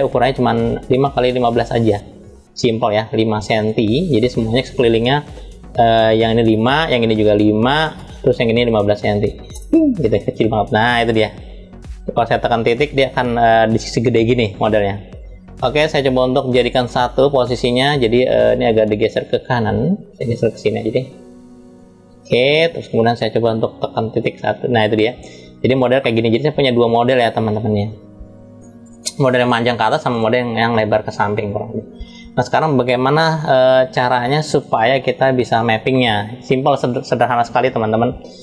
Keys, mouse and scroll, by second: 1.6 click, 2.2 scroll down 1, 2.3 scroll up 1, 2.6 scroll down 1, 3.3 click, 3.3 scroll down 1, 4.4-6.3 drag, 6.9 click, 8.3-9.3 drag, 9.8 scroll down 1, 11.0 scroll down 4, 12.5 scroll up 1, 12.5 KP_Decimal, 14.2 scroll up 1, 14.3-15.2 scroll down 5, 17.3 scroll down 3, 18.3 click, 19.6-22.6 drag, 23.7 KP_Decimal, 24.7-25.2 scroll down 1, 25.2 scroll down 2, 25.8-27.2 shift+middle drag, 27.2-28.5 drag, 28.6 click, 29.1 click, 29.8 click, 30.5-31.9 middle drag, 31.9 scroll up 1, 33.0 n, 35.6 middle click, 36.5 scroll up 1, 38.1 click.